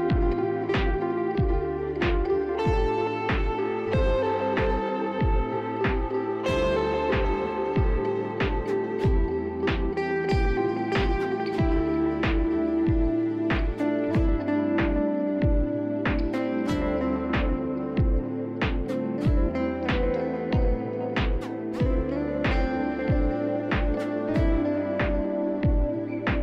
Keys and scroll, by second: 22.4-23.4 typing.